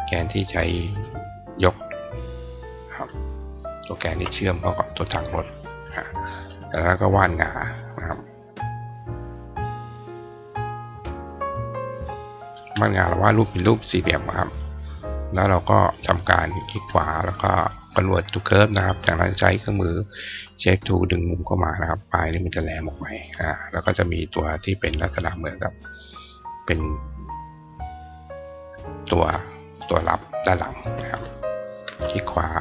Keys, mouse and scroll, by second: 0.7 click, 1.8 click, 3.9 shift+click, 5.2 click, 7.5 click, 8.7-12.4 drag, 14.4-15.9 drag, 16.3 right click, 17.7 click, 18.8 click, 21.1 click, 24.8 click, 26.0-28.5 drag, 30.6 click, 31.7 shift+click.